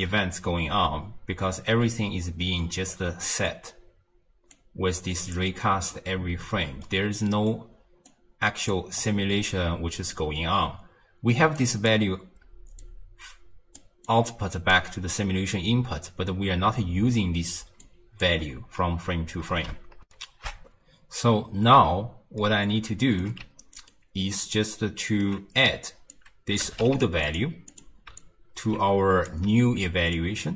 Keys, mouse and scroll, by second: 0.7 space, 1.8 space, 2.2-2.9 middle drag, 2.9-3.3 scroll down 1, 3.3-4.5 middle drag, 4.5-5.6 drag, 5.6-5.9 scroll down 1, 5.9-8.1 middle drag, 8.1 click, 8.9-9.3 scroll up 4, 9.3-11.4 middle drag, 11.4 d, 11.6 click, 11.9-12.7 d, 12.8 click, 13.8 d, 14.1 click, 14.7 d, 17.6 d, 17.8-18.2 drag, 18.2 d, 20.1 n, 22.4-23.4 middle drag, 23.4 d, 23.9-25.2 right drag, 25.2 d, 26.1 click, 26.9 d, 28.2 alt+click, 30.2 click.